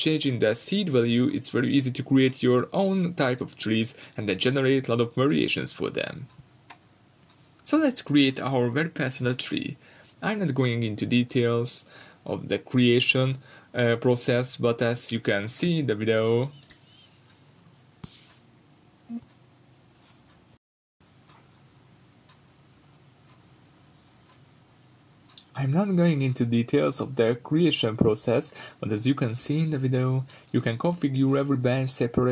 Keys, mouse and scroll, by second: 2.4 scroll down 2, 2.5-3.2 middle drag, 2.8-3.2 scroll up 2, 3.2-8.2 drag, 8.2-8.5 middle drag, 8.5-9.8 drag, 10.4-11.1 scroll up 4, 10.6-12.5 shift+middle drag, 11.1-11.4 scroll down 2, 12.5-15.4 drag, 14.1 scroll down 1, 14.6 scroll up 1, 18.2 scroll up 1, 18.5 scroll down 1, 19.7 click, 21.7-25.9 drag, 28.0 click.